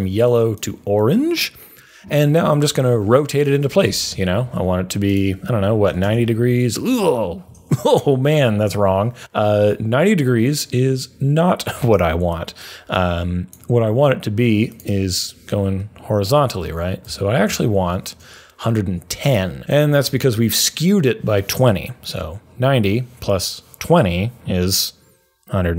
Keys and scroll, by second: 3.8 r, 5.6-6.4 typing, 16.5 Up, 17.4 Up.